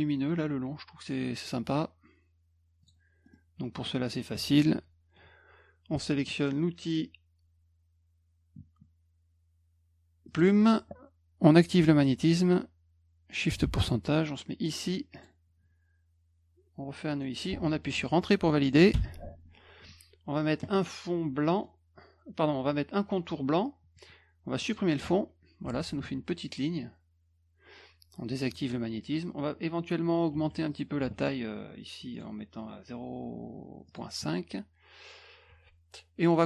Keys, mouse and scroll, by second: 2.8 click, 3.2 middle click, 3.6 middle click, 10.3 click, 13.6 shift+ù, 15.2 click, 17.1 click, 18.9 Return, 21.5 middle click, 24.6 click, 25.6 F1, 25.8 click, 26.0 F2, 28.5 click, 30.3 F2, 30.7 click, 31.0 F1, 32.1 right click, 33.9 click, 35.5 F2.